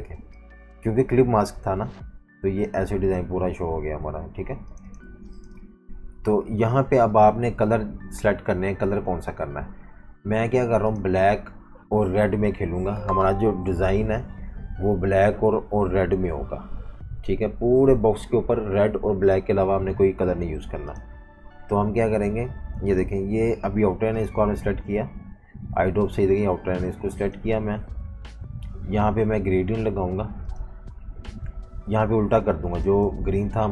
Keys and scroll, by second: 5.1 v, 5.2 space, 6.6 super+-, 23.0 i.